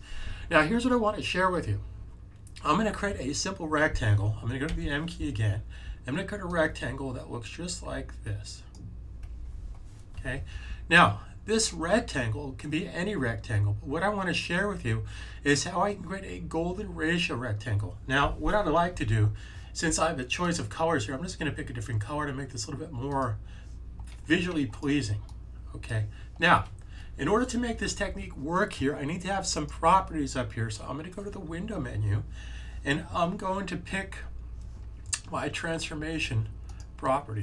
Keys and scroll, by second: 4.6 m.